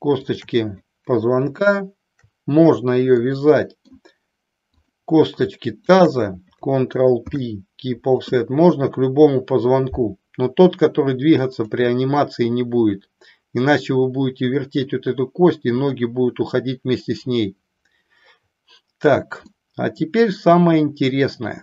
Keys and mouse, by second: 0.3 shift+click, 3.2 middle click, 4.8 click, 7.3 ctrl+p, 19.5-21.6 middle drag.